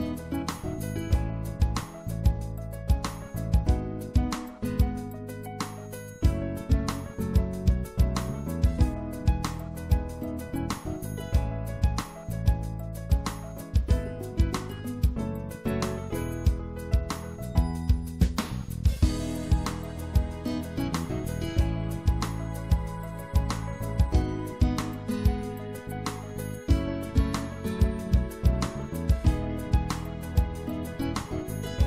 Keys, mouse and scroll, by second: 3.0 KP_7, 6.6 KP_1, 7.5 KP_3, 9.1 KP_5, 15.4 s, 16.3-18.6 middle drag, 18.8 middle click, 19.2 middle click, 22.9-26.5 drag, 23.8 right click, 24.9 right click, 28.4-29.4 middle drag.